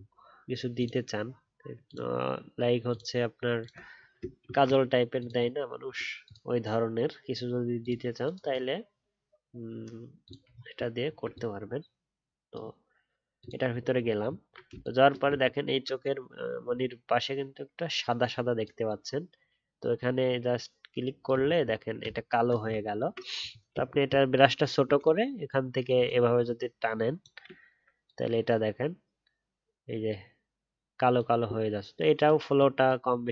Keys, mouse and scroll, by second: 10.5-11.0 alt+scroll down 1, 13.9 alt+scroll down 1, 14.0-14.3 alt+scroll up 1, 15.3-15.7 alt+scroll up 2, 21.4 alt+scroll down 1, 22.7 alt+scroll up 4.